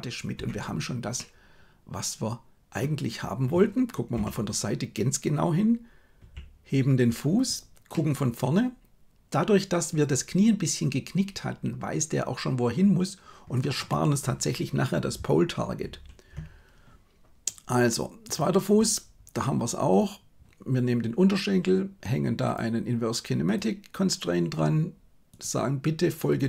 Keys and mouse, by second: 1.2-2.8 middle drag, 4.1 KP_1, 6.1 g, 7.8-13.6 middle drag, 15.7 ctrl+z, 22.4-23.6 drag, 25.2-26.4 drag.